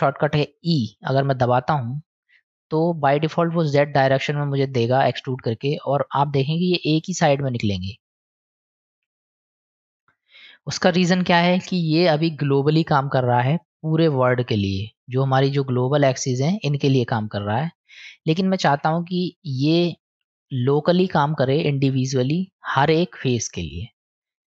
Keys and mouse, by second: 1.2 e, 18.7 ctrl+z, 20.0 click, 21.2 click, 22.0 click, 23.6-24.5 drag.